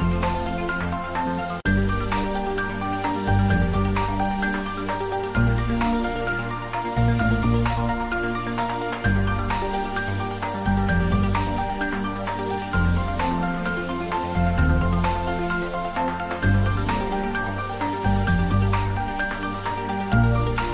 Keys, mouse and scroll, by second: 1.5 click, 2.3 s, 3.2 click, 3.6 g, 4.4 click, 4.7 r, 5.3 click, 5.8 g, 6.5 z, 7.9 click, 8.2 Tab, 8.5 click, 9.1 g, 10.7-11.1 scroll down 1, 11.9-12.3 scroll up 1, 12.7 click, 13.0 ctrl+z, 13.3 Tab, 14.3 r, 15.3 click, 16.7 click, 17.4 Tab, 18.0 a.